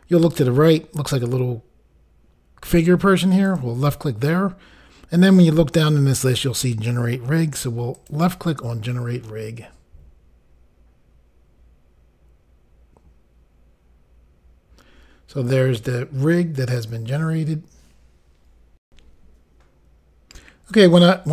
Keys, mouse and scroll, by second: 3.5 click, 7.9 click, 8.1 click, 18.8 Insert.